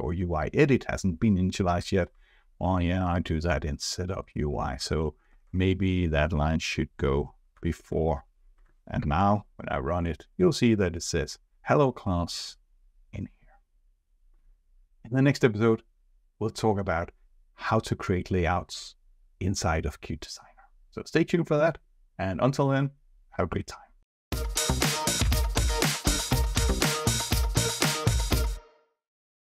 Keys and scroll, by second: 5.2 ctrl+shift+Up, 7.5 ctrl+s, 8.9 ctrl+r.